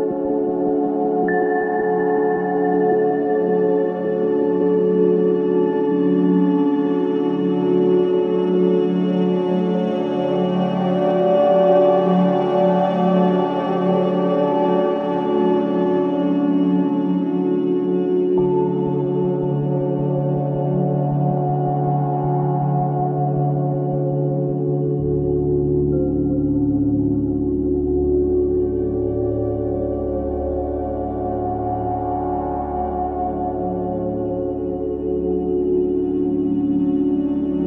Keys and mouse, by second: 1.6 click, 2.7 Tab, 7.1 0, 8.3-9.1 typing, 9.5 Return, 10.9 alt+click, 12.0 typing, 12.7 click, 13.5 typing, 14.8 s, 16.2 click, 16.2 typing, 17.6-18.0 typing, 19.2-19.9 typing, 19.4 click, 19.8 ctrl+alt+click, 20.5 alt+shift+click, 20.9 ctrl+alt+click, 22.5 click, 23.0 click, 24.3-25.7 typing, 25.5 click, 26.7-28.2 typing, 27.7-28.7 drag, 30.0-31.5 drag, 31.5-34.3 typing, 32.3 click, 34.3 click, 35.4 click, 36.5 Tab, 36.5 typing, 37.4 click.